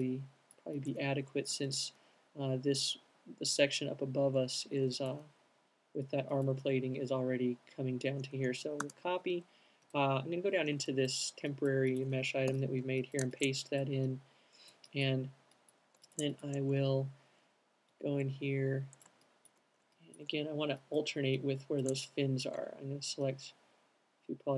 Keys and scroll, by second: 9.0 alt+super+c, 12.6 alt+super+v.